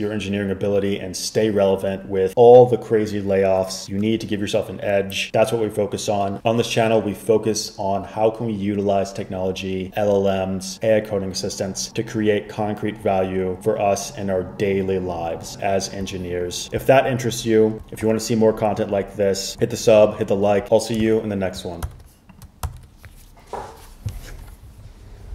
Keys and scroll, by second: 22.0 super+h, 22.8 super+h.